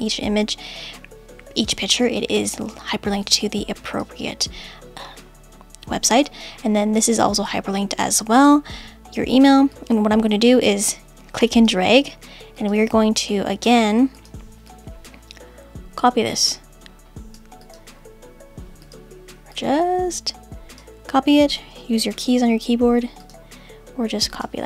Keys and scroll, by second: 22.1 super+c.